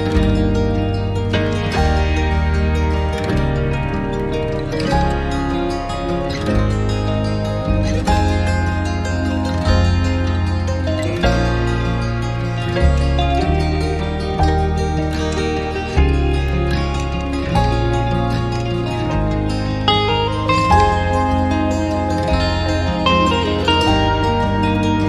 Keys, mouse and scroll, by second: 22.1 alt+click, 23.3 scroll down 1, 23.9 alt+click.